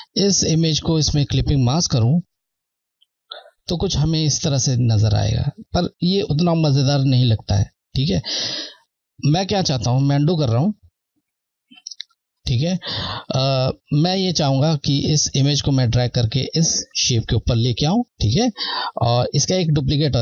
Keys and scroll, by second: 3.1 Left, 8.2 ctrl+z, 10.7 z, 13.5 Left.